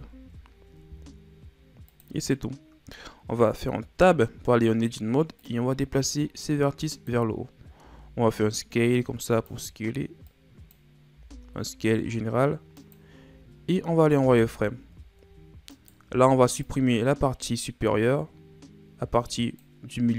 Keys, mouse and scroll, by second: 4.0 Tab, 5.5-7.8 drag, 7.8 s, 10.3 click, 11.2 s, 13.6 scroll up 4, 14.2 z, 15.1-15.8 scroll down 2, 15.8 right click, 16.1 b.